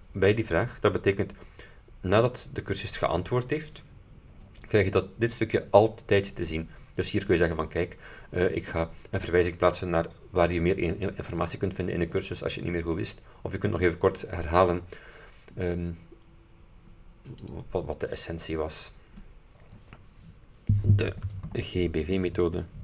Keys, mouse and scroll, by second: 17.5 click, 21.0-22.8 typing.